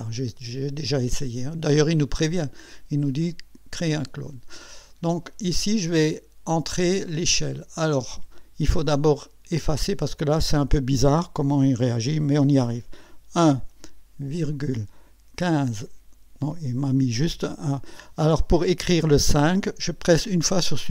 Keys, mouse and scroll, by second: 6.7-8.0 drag, 9.6 Delete, 13.3 KP_1, 14.3 ,, 15.3 KP_1, 15.5 KP_5, 20.5 Delete.